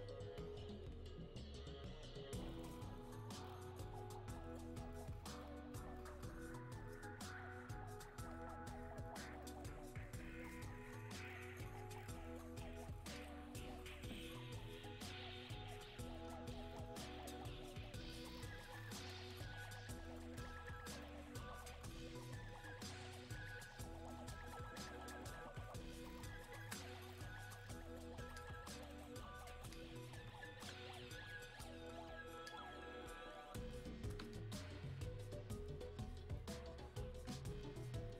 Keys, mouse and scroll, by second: 0.9 click, 8.4 click, 13.3 click, 19.3 click, 20.2 ctrl+shift+1, 22.9 ctrl+shift+click, 23.0 ctrl+shift+1, 26.6 ctrl+shift+1, 28.4-31.7 shift+drag, 32.5 alt+click, 33.4 click, 34.4 alt+click, 34.9-38.1 alt+drag.